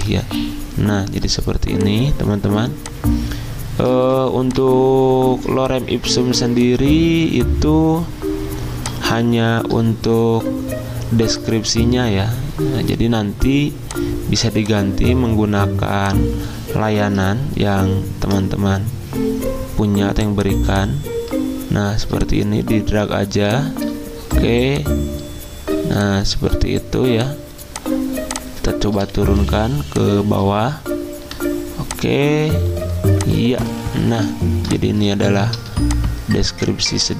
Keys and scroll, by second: 4.0 ctrl+z, 17.7 ctrl+t, 29.4 Escape.